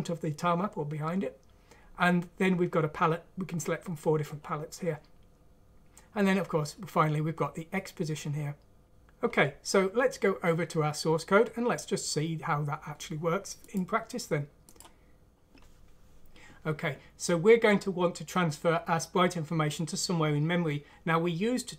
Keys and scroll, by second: 15.2 F3.